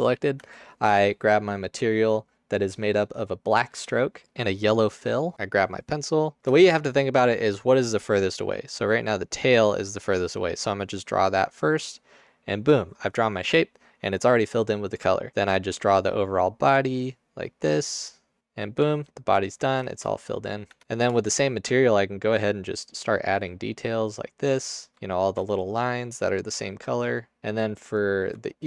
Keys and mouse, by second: 6.4 ctrl+alt+shift+z, 9.5-10.5 drag, 15.5-17.1 drag, 19.0 ctrl+alt+click, 20.8 Tab, 25.9 click, 27.0 click, 28.0 click, 28.5 shift+click.